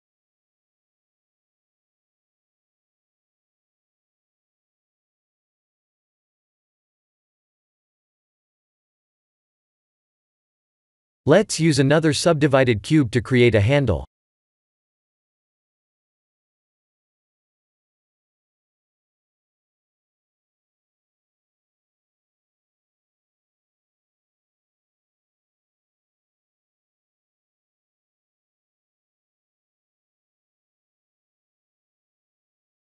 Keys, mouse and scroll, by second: 0.0 s, 2.8 g, 4.5 click, 5.0 middle click, 5.4 middle click, 9.0 KP_3, 9.4 KP_1, 10.2 click, 10.9 click, 12.6 shift+a, 18.1 g, 21.9 scroll up 3, 22.4 shift+middle click, 23.2 Tab, 24.2 shift+z, 27.2 ctrl+3, 29.1 Tab, 29.9 ctrl+3, 30.3 Tab, 31.0 r, 32.4 ctrl+r.